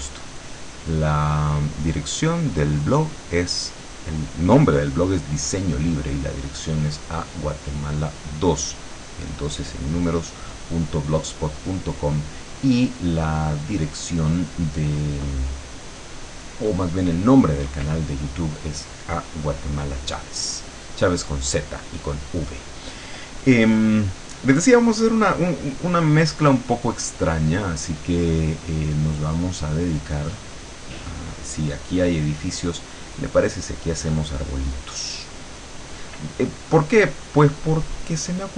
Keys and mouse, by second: 0.4-2.0 drag, 2.5-4.3 drag, 8.8-10.4 drag, 27.4 click, 29.6 click, 36.9-38.5 drag.